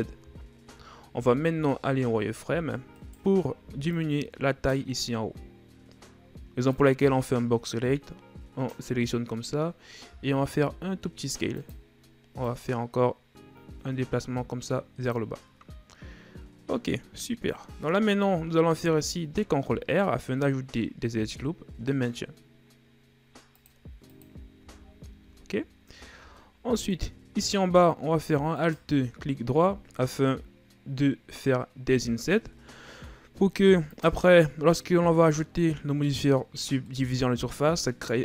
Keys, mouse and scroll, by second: 0.4 shift+scroll up 2, 1.1 z, 1.8-2.3 shift+scroll up 1, 2.3-2.8 shift+scroll up 1, 3.0 right click, 3.6 b, 6.7-9.5 drag, 9.5-10.1 scroll up 1, 10.1 s, 12.5-15.4 drag, 18.8 ctrl+r, 24.6 z, 26.0-26.4 shift+scroll down 2, 26.4-27.4 middle drag, 27.4-28.6 scroll up 1, 28.6 alt+right click, 34.8-38.2 middle drag.